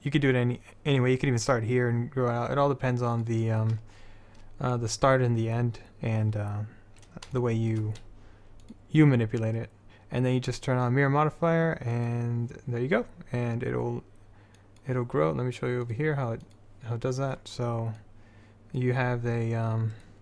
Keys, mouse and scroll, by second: 3.3-6.4 drag, 8.8-12.1 middle drag, 12.1-13.1 drag, 14.7-20.1 drag.